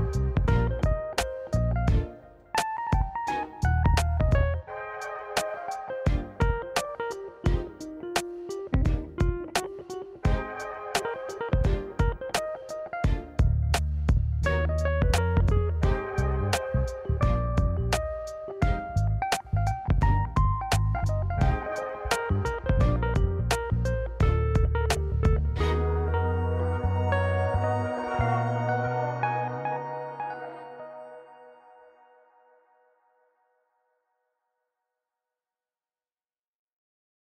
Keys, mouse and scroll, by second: 0.5 middle click, 0.9 scroll down 1, 1.0 scroll down 1, 1.1 click, 1.3 middle click, 1.8 click, 2.6-3.5 drag, 3.7 middle click, 4.4 click, 4.9 middle click, 5.6 click, 5.8 click, 6.0 middle drag, 6.3 middle drag, 6.5-7.1 scroll down 2, 6.6-7.1 middle drag, 7.2-7.6 scroll up 3, 8.1-8.7 scroll down 1, 8.7 middle click, 8.7 scroll down 1, 9.2 middle click, 9.3 a, 9.6 s, 10.2 middle drag, 10.9 KP_1, 11.2-11.6 scroll up 3, 11.5 shift+middle click, 11.8 ctrl+z, 12.1-12.4 scroll down 2, 12.4 click, 12.9 click, 16.1 scroll up 2, 16.4 shift+middle drag, 17.2 Tab, 17.6 Tab, 17.7 click, 17.8 Tab, 18.5 alt+z, 18.7 click, 19.5 g, 21.1 Tab, 21.3 scroll down 1, 21.5 Tab, 21.8 alt+z, 22.1 middle click, 22.3 Tab, 22.5 middle click, 22.6 click, 23.0 drag, 23.2 middle click, 23.7 KP_1, 24.1 scroll up 2, 24.3 shift+middle click, 24.6 shift+middle drag, 26.5 shift+a, 28.6 s, 29.6 middle click, 30.2 KP_7, 30.4 alt+z, 30.8 s, 32.9-34.7 drag, 35.6 KP_1, 36.1 alt+z, 36.9 click.